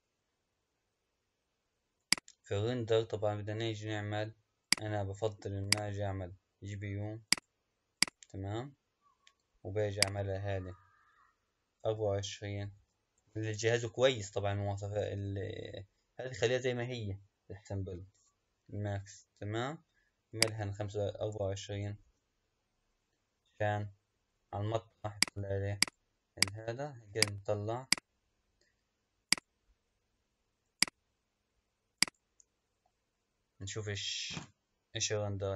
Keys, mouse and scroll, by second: 0.0 scroll down 1, 0.7 scroll up 3, 1.8 click, 4.5-8.1 drag, 10.0-12.5 drag, 13.8-14.6 scroll down 1, 14.6-15.0 scroll down 1, 18.5-19.7 scroll down 1, 19.7-20.1 scroll down 1, 20.2-22.8 drag, 22.8-23.2 scroll down 3, 24.5 click, 25.7-31.1 drag.